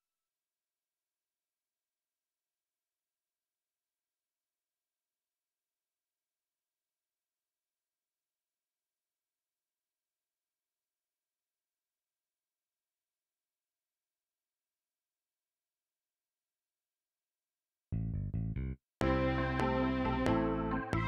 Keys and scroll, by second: 10.7 ctrl+s, 18.9 space, 19.9 F7.